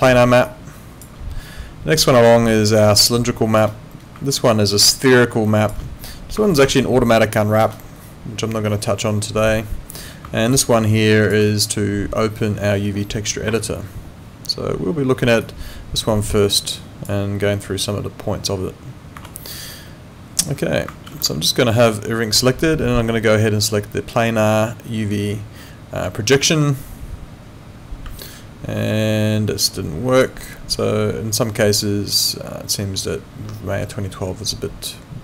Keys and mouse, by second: 21.3 4, 26.3 click, 28.2 click.